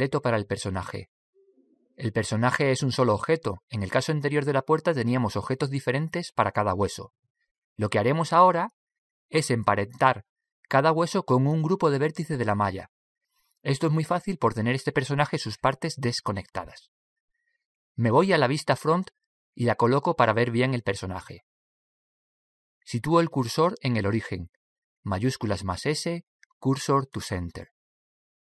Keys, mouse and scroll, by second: 20.6 KP_1, 21.6-23.8 middle drag, 26.2 shift+s.